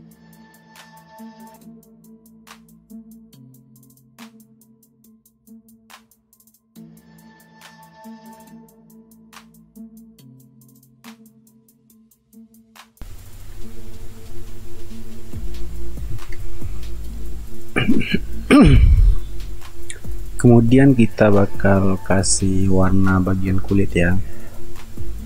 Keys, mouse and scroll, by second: 1.2 [, 1.3 ], 3.4 space, 4.5 ctrl+alt+z, 5.4 ctrl+space, 5.6 ctrl+alt+z, 6.1 [, 7.1 space, 9.2 space, 9.7 space, 10.2 space, 10.5 r, 11.6 space, 11.9 r, 12.2 space, 12.7 space, 14.1 space, 16.2 ctrl+s.